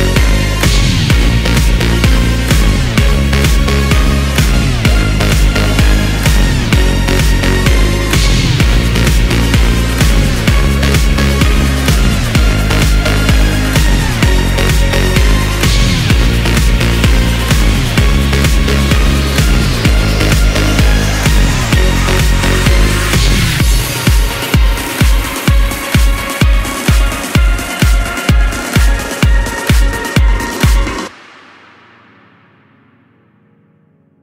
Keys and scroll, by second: 19.9 Delete, 32.5 Delete.